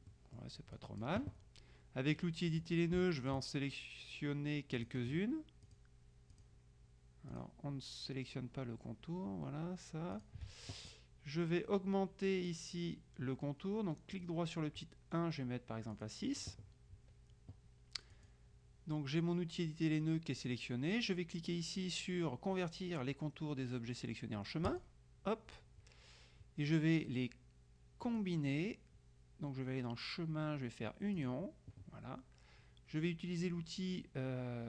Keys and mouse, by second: 0.9 click, 2.7 click, 3.4 shift+click, 4.9 click, 5.8 click, 7.5 click, 10.3 click, 14.3 right click, 16.1 click, 18.2 click, 24.8 click, 28.1 click, 31.3 click.